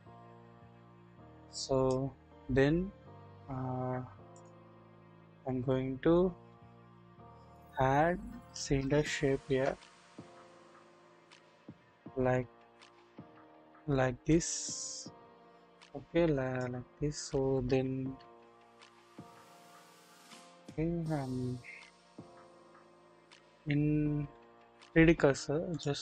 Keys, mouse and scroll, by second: 2.7-3.7 scroll up 1, 4.4 middle click, 4.4 scroll up 1, 4.7 scroll down 1, 6.7 KP_1, 7.7-8.7 scroll up 1, 8.7 KP_1, 9.0 shift+middle click, 9.1-9.6 shift+drag, 9.7-10.4 shift+scroll down 2, 11.3 click, 12.0-16.6 drag, 18.0 ctrl+z, 18.6-19.1 scroll down 1, 19.1 click, 20.5 click, 20.9 scroll up 1, 21.6 scroll down 1, 22.2 KP_1, 22.5-23.0 scroll, 25.2-25.6 scroll up 1, 25.7 click.